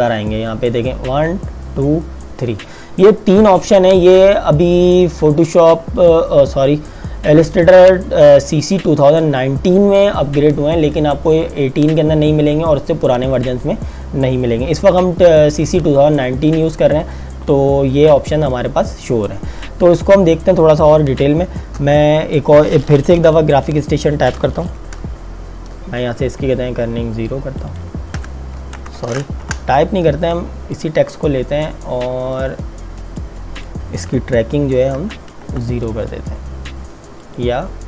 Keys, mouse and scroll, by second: 4.9 click, 21.9 alt+Num_Lock, 22.7 click, 23.2 t, 23.6 click, 27.3 click, 28.2 KP_0, 28.8 KP_Enter, 29.4 Delete, 30.9 click, 35.0 KP_0, 35.5 KP_Enter, 37.3 click.